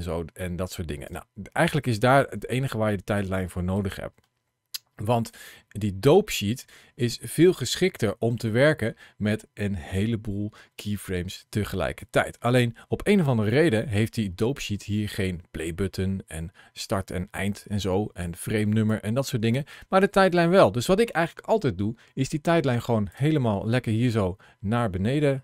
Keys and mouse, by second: 3.7-5.2 drag, 6.4-11.8 drag, 13.1 ctrl+shift+a, 13.1 shift+c, 20.5-23.0 drag.